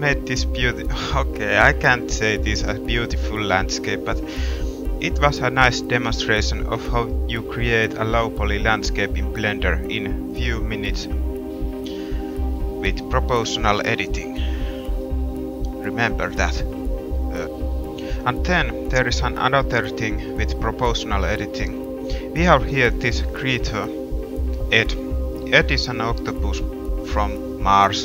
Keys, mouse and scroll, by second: 1.1 middle drag, 1.4 middle drag, 1.9-2.3 middle drag, 2.8 middle drag, 3.1 middle click, 4.9-5.3 drag, 5.1 middle drag, 5.3 middle click, 5.5 middle click, 7.0-7.3 middle drag, 7.4 middle click, 8.4 middle click, 8.6 middle click, 8.8 middle drag, 9.0 middle drag, 10.2 middle click, 13.2 middle drag, 13.6 middle click, 15.1 middle click, 15.6 middle drag, 15.9 middle click, 18.7 a, 19.2 middle click, 19.8 middle click, 21.6 g, 24.7-25.6 middle drag, 25.8 middle click, 26.2-27.0 middle drag, 27.0-28.0 drag.